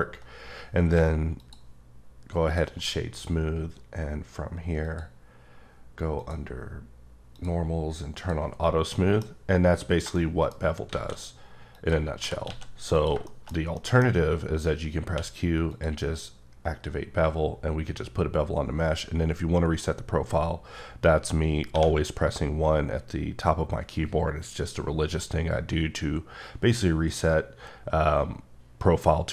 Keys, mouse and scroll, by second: 1.4 click, 2.5 click, 4.8 click, 6.1 click, 7.3 click, 8.1 click, 8.9 middle click, 11.7 click, 12.2 g, 12.5 x, 12.9 click, 13.2 shift+middle click, 15.1 q, 15.7 click, 21.7 1.